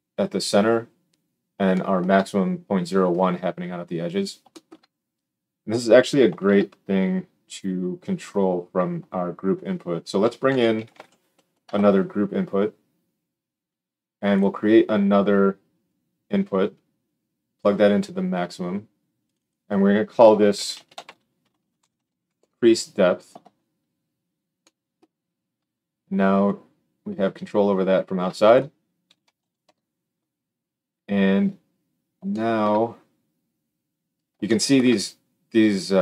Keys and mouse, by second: 5.9-15.8 shift+middle drag, 6.4 shift+a, 15.8-36.0 drag.